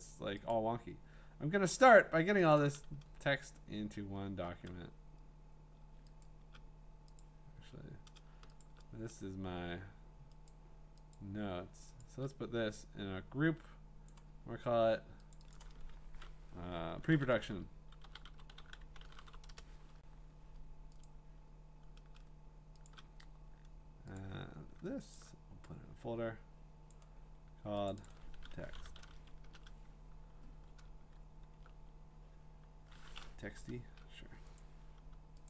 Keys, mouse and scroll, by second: 0.5 scroll, 0.5 click, 1.4 scroll, 2.5 click, 2.8-4.1 scroll, 5.1-5.6 scroll, 6.2 shift+click, 7.2 click, 8.6 shift+click, 10.5 click, 11.1 click, 11.4 shift+click, 12.0 shift+click, 13.3 shift+click, 14.1 click, 14.4 scroll, 15.3 click, 15.5 click, 16.9-19.7 typing, 17.1 middle click, 21.0 click, 22.9 shift+click, 24.2 click, 25.1 shift+click, 26.9 click, 27.9 click, 28.0 shift+click, 28.1-29.5 typing, 28.1 click, 28.2 shift+click, 30.5 v, 31.2 middle click, 31.3 middle click, 31.4 middle click, 32.3 scroll, 33.4 BackSpace, 33.8 Return, 34.6 click.